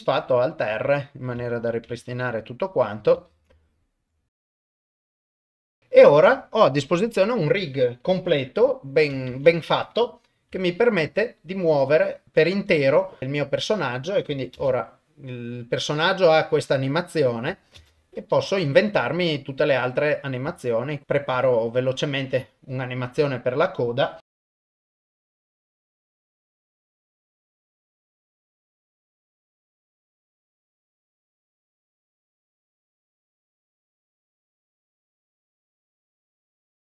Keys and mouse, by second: 0.2 alt+r, 1.0 shift+middle click, 1.5 ctrl+middle click, 1.9 ctrl+Tab, 3.3 ctrl+s, 3.6 ctrl+shift+middle click, 4.6 click, 5.4 ctrl+s, 5.4 shift+middle click, 5.5 ctrl+Tab, 5.7 click, 9.3 ctrl+Tab, 10.5 r, 11.7 click, 11.7 click, 12.2 r, 13.2 click, 13.2 shift+middle click, 14.6 shift+space, 17.8 shift+space, 18.4 shift+Left, 20.6 shift+middle click, 21.0 shift+click, 22.4 click, 24.2 shift+middle click, 24.3-26.2 typing, 24.6 click, 25.2 click, 26.3 click, 27.4-36.8 typing, 27.7 click, 28.5 click, 29.2 click, 30.4 click, 30.7 click, 30.9 click, 31.1 Left, 31.1 Right, 31.1 Right, 31.2 Right, 31.2 click, 31.5 click, 31.7 Down, 31.8 Down, 31.8 Up, 32.1 click, 32.3 shift+Left, 32.8 shift+Left, 33.1 click, 33.2 shift+click, 33.8 shift+click, 34.0 shift+Left, 34.2 click, 35.5 click, 36.0 click, 36.6 click.